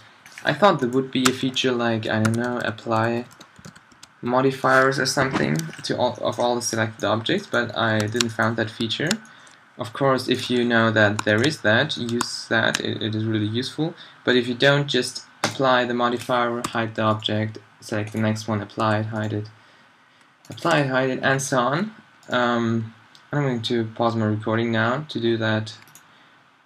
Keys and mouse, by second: 0.4 middle click, 1.3 space, 5.7 middle click, 16.7 h, 18.8 h, 20.7-26.6 h, 22.3-26.6 middle drag.